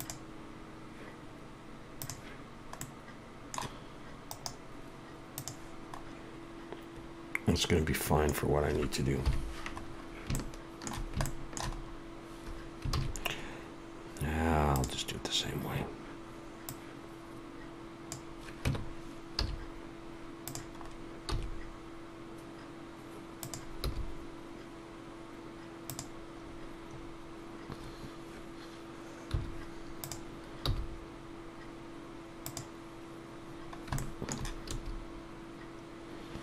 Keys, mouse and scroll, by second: 2.0 click, 2.8 middle click, 4.3 right click, 5.9 scroll up 1, 6.0 scroll down 8, 6.0 scroll up 1, 9.3 KP_7, 9.9 scroll up 2, 10.3 shift+middle click, 11.7-12.1 scroll up 2, 12.9 shift+a, 15.7 scroll down 3, 16.7 click, 18.7 Tab, 19.4 z, 20.8 scroll up 2, 21.3 s, 23.9 g, 26.4 scroll up 3, 32.5 g, 33.5-33.9 scroll down 1, 34.0 shift+middle click.